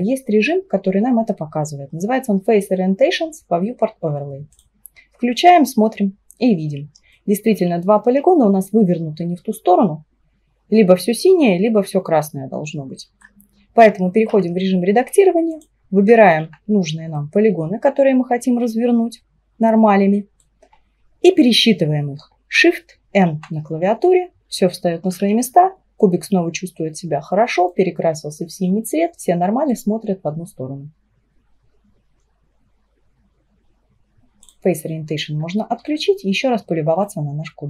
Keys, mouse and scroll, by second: 7.2-10.4 middle drag, 14.4 Tab, 15.6 click, 16.3 shift+click, 17.2-20.3 middle drag, 23.1 shift+n, 25.1 Tab, 26.0-29.1 middle drag, 29.8-32.9 drag, 35.9-37.6 middle drag.